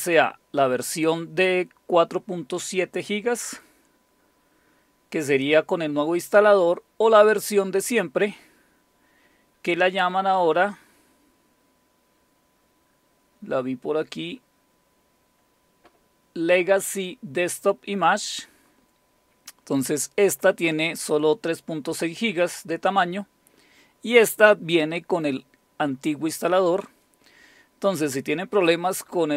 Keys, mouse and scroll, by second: 7.8 click, 8.6 click, 8.8 scroll down 2, 9.1-12.2 scroll up 10, 12.8-28.5 scroll down 5, 28.5 click.